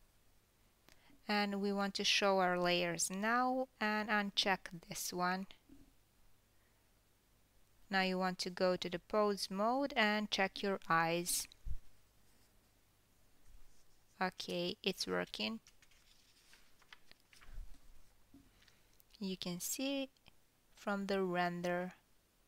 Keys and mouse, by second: 0.2 click, 0.3 middle click, 1.0 click, 1.1-1.5 middle drag, 1.6 middle click, 2.0-2.6 drag, 2.6 middle click, 2.8 click, 2.9 middle click, 3.2 click, 3.2 middle click, 3.6 shift+click, 3.8 shift+middle click, 4.2 shift+click, 4.3-7.0 shift+middle drag, 7.0 shift+click, 7.8 shift+click, 11.3-13.2 drag, 14.0 g, 14.1-19.5 middle drag, 20.0 F12, 22.4 ctrl+KP_1.